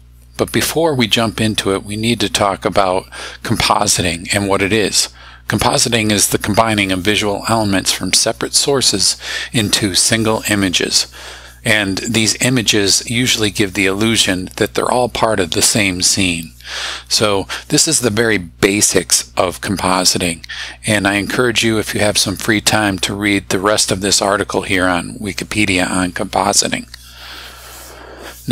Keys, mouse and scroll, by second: 1.4 click.